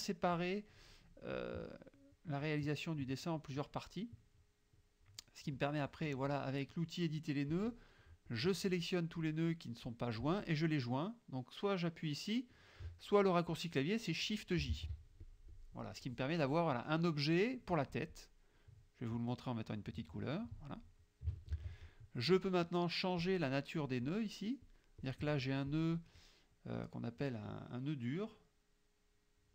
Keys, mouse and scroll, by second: 1.4 click, 5.6-6.9 drag, 7.6 click, 8.4-9.5 drag, 14.8 shift+j, 15.3 shift+click, 16.2 click, 19.9 click, 21.6 ctrl+z, 23.3 click, 23.9 click, 24.7 click, 25.1 click, 25.7 click, 26.8 click.